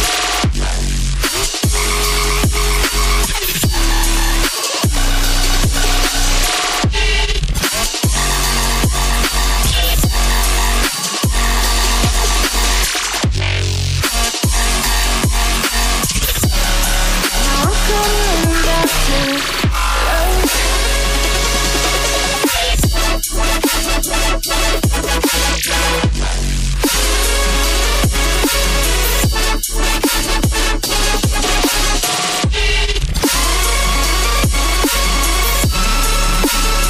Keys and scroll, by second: 2.2 ctrl+a, 2.2 ctrl+d, 7.1 ctrl+d, 35.2 Caps_Lock.